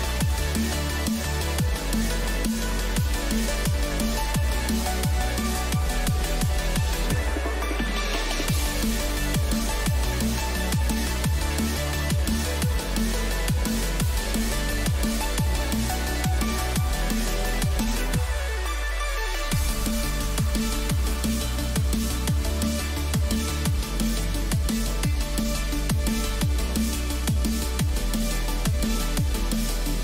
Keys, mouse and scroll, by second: 3.3-6.4 middle drag, 6.9 middle click, 7.9-11.6 drag, 8.9-13.2 right drag, 13.2-15.1 middle drag, 15.6-17.9 right drag, 16.4 click, 17.9 v, 21.7-23.8 drag, 22.2-24.8 middle drag, 25.7-27.4 drag.